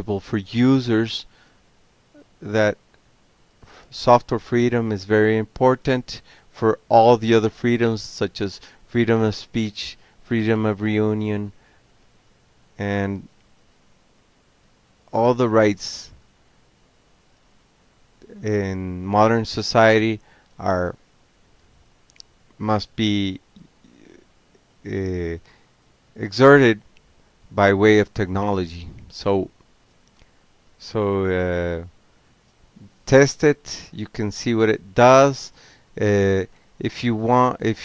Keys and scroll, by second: 1.8 BackSpace, 1.9 BackSpace, 2.1 BackSpace, 2.1 BackSpace, 3.5 ctrl+c, 3.7 ctrl+a, 4.2 1, 4.3 1, 4.5 Return, 5.5 m, 5.6 Tab, 6.7 Return, 6.7 typing, 7.2 Tab, 7.9 o, 8.6 e, 8.9 e, 9.1 e, 9.5 Tab, 10.3 s, 10.4 Tab, 12.5-15.0 typing, 14.5 Return, 15.3 Tab, 15.8 Tab, 16.2 Tab, 16.3 typing, 17.8 alt+q, 22.2 ctrl+p, 24.5 alt+b, 27.7 ctrl+c, 28.8 ctrl+o, 29.6 ctrl+p, 31.1 y, 32.6 Tab, 33.7 p, 33.9 Tab, 34.9 Return, 37.5 ctrl+x.